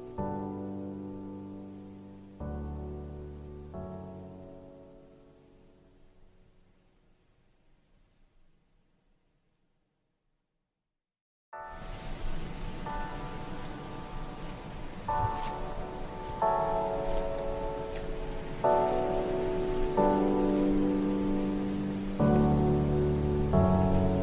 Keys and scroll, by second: 2.6 ctrl+z, 6.0 ctrl+z, 20.8 Escape, 22.7 z.